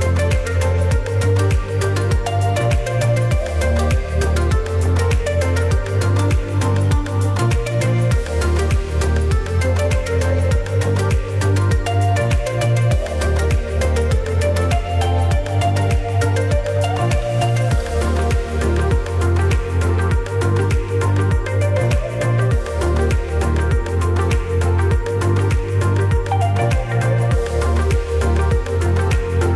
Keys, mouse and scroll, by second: 0.0 typing, 4.9-5.3 alt+scroll down 1, 5.5 space, 5.7 click, 5.7 space, 6.0-6.4 alt+scroll up 1, 7.0 ctrl+s, 8.7-23.9 drag, 24.0 click, 26.3 ctrl+g, 26.8-29.5 drag.